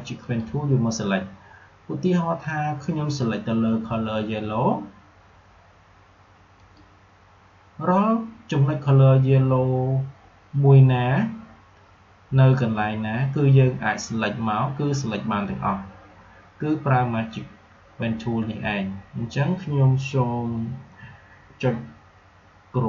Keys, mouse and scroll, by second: 0.2 click, 6.5 click.